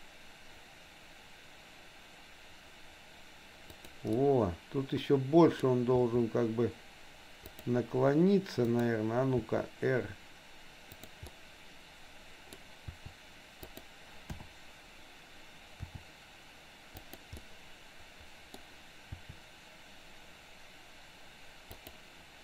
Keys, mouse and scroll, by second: 4.2-5.6 middle drag, 6.1 r, 8.7 click, 9.3 r, 11.3-12.6 middle drag, 12.6-13.0 scroll down 1, 13.0 r, 14.3 KP_7, 15.8 r, 17.3-18.6 middle drag, 18.6 scroll down 1, 19.2 r.